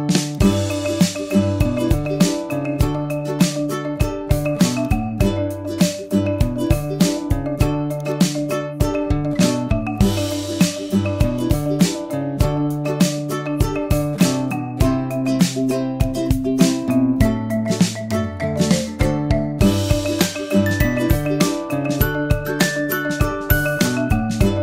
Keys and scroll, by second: 21.8 super+j, 23.5 super+t.